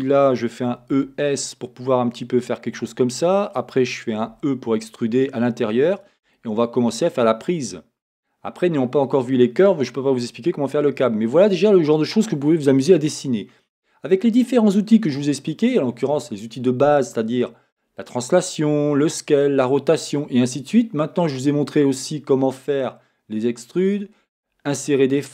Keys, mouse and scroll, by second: 0.7 e, 2.8 click, 5.9 e, 6.0 click, 6.4 middle click, 9.0-11.5 middle drag, 12.3-16.4 scroll.